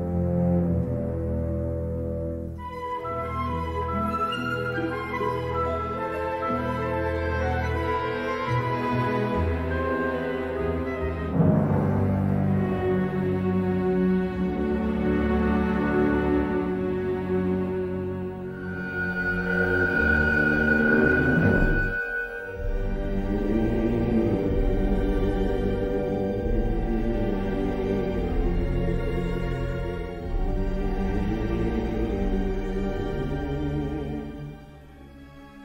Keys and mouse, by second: 0.5 s, 7.3 middle click, 8.6 middle click, 10.0 l, 10.8 shift+d, 11.6 g, 14.2 l, 17.4 l, 17.7 x, 19.1 middle click, 19.9 middle click, 21.4 l, 22.0 g, 23.5 middle click, 24.2 middle click, 24.9 3, 25.4 shift+middle click, 26.1 shift+click, 26.9 i, 28.4 g, 30.9 i, 33.6 middle click.